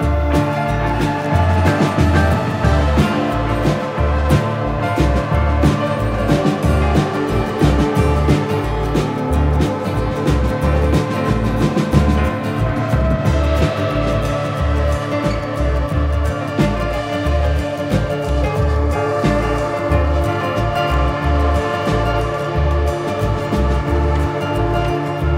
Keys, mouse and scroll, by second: 2.3 click, 3.1 click, 4.0 click, 5.1 shift+middle click, 6.8 click, 7.5 shift+middle click, 8.4 Tab, 9.5 click, 10.0 shift+middle click, 10.4 click, 11.3 click, 12.1 click, 12.6 click, 13.8 click, 15.5 Tab, 15.7 click, 16.6 click, 16.7 l, 17.5 Tab, 18.1 click, 20.1 middle click, 20.3 scroll down 1, 20.7 middle click, 21.0 click, 22.8 click, 22.9 middle click, 24.1 click, 24.7 click.